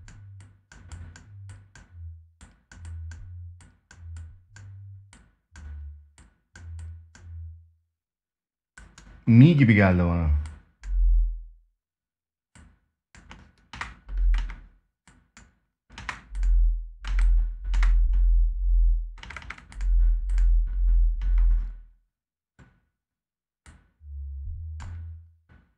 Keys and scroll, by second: 13.4 space, 15.7 space, 18.9 space, 20.9 space.